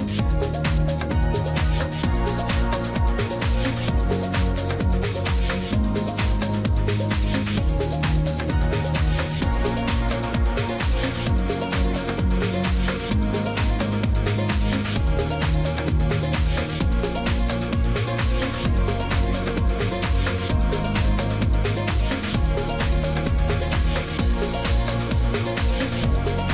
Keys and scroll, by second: 25.1 ctrl+alt+shift+e.